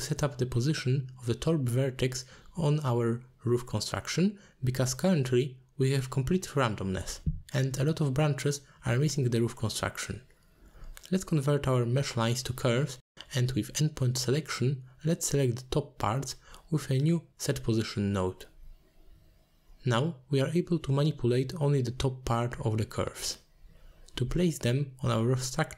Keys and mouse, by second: 1.1 alt+shift+click, 3.4 g, 4.9 middle click, 5.4 middle click, 6.1 alt+shift+click, 7.0 middle drag, 10.0 middle click, 11.1-14.3 drag, 14.9-16.9 drag, 17.6 click, 17.8-19.8 drag, 20.7 click, 21.3 alt+shift+click, 22.1-24.2 drag, 24.4 middle click, 25.0 shift+a.